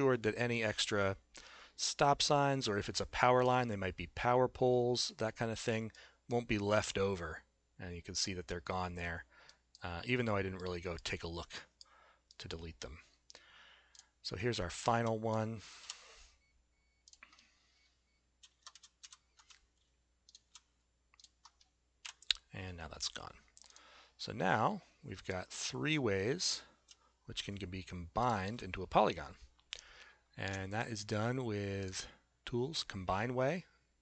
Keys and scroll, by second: 15.9 p, 18.6 Caps_Lock, 22.0 Delete.